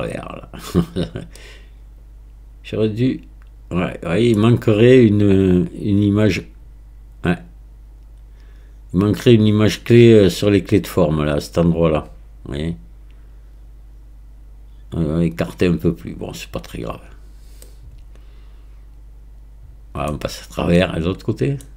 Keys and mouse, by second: 1.4-4.4 middle drag, 17.8-20.2 middle drag, 20.8-21.6 middle drag.